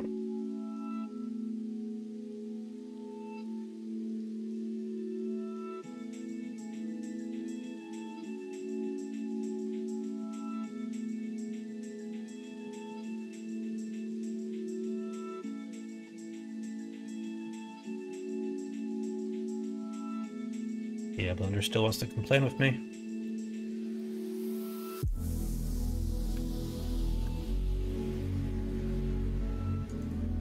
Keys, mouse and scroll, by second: 1.7 middle click, 2.4 alt+click, 4.5 click, 5.9-8.8 ctrl+drag, 22.5 middle click, 23.9 middle click, 25.0 click, 26.8-29.4 ctrl+drag, 29.9 shift+click.